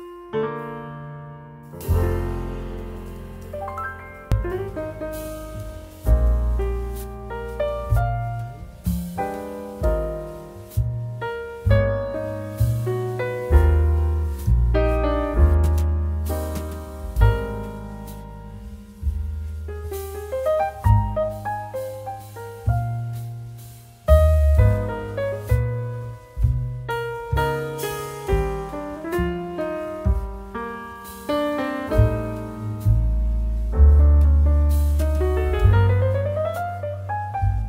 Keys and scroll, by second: 0.6 ctrl+i, 7.5 ctrl++, 7.7 ctrl++, 8.2 ctrl++, 9.9-10.9 space, 16.9-17.4 space, 26.7 ctrl++, 27.2-28.2 space, 35.7-36.4 space.